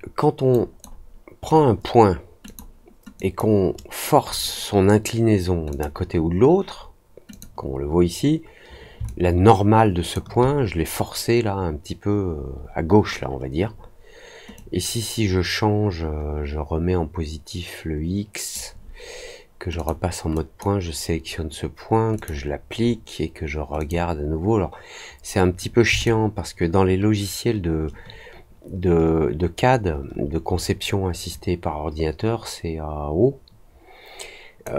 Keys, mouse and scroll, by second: 0.4 click, 2.4 click, 3.1 click, 5.6 click, 7.2 click, 9.0-10.1 alt+drag, 14.5-18.5 drag, 19.7 click, 20.3 click, 22.1 click, 23.7 click, 26.0-34.6 alt+drag.